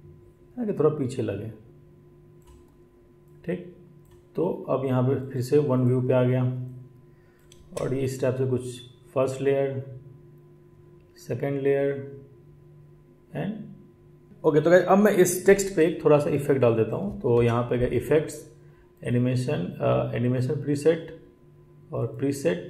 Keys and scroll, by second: 14.3 ctrl+z, 17.3 BackSpace.